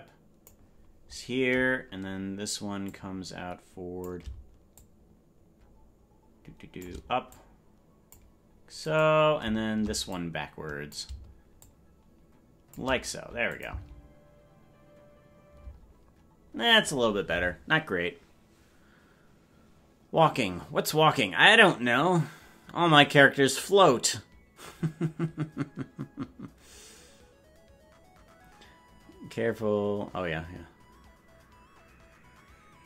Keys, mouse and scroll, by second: 2.8-4.0 drag, 4.7-6.8 shift+drag, 7.2 click, 8.9 right click, 10.0 click, 11.5-12.7 shift+drag, 13.4-15.8 shift+drag, 13.6 space, 15.6 space.